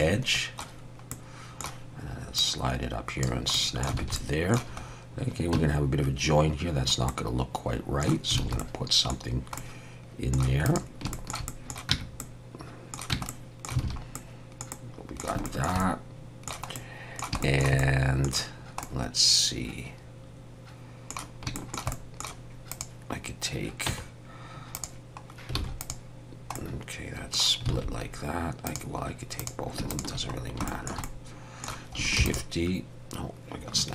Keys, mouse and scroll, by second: 1.1 middle click, 2.4 click, 3.5 middle click, 4.0 alt+a, 4.2 middle click, 4.8-5.2 scroll up 1, 5.4 scroll up 1, 5.5 Tab, 6.3 scroll down 1, 7.1 middle click, 8.4 alt+a, 8.6 middle click, 9.3 scroll down 1, 9.6 middle click, 10.6 click, 11.1 shift+middle click, 11.5 middle click, 11.9 Tab, 12.2 middle click, 13.1 Tab, 13.3 middle click, 13.9 alt+a, 14.1 middle click, 14.7 middle click, 15.5 shift+middle click, 15.5 shift+middle click, 15.8 middle click, 16.8 middle click, 17.4 shift+middle click, 17.8 middle click, 18.5 scroll down 1, 18.8 middle click, 21.6 shift+middle click, 21.9 middle click, 22.7 click, 23.3 scroll down 1, 23.9 Tab, 24.8 click, 25.6 alt+a, 25.8 click, 26.5 middle click, 27.7 alt+a, 28.7 click, 29.4 click, 29.9 shift+click, 30.1 shift+click, 30.4 scroll down 1, 30.7 shift+middle click, 31.0 middle click, 32.2 shift+d.